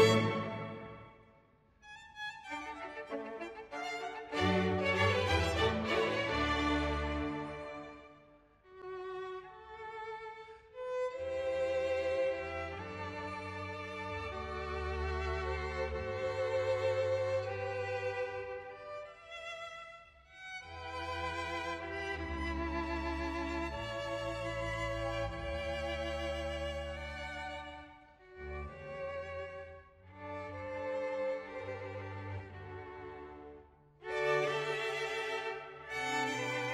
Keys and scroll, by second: 5.2 ctrl+s, 11.7 ctrl+d, 18.5 ctrl+d, 31.5 ctrl+s.